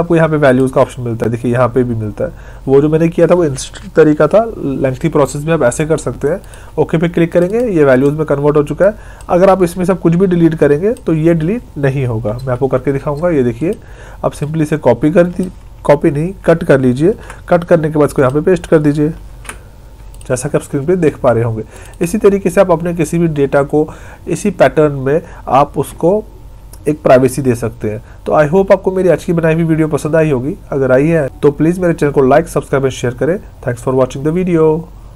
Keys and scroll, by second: 12.3 Delete, 17.0 ctrl+x, 19.2 ctrl+v.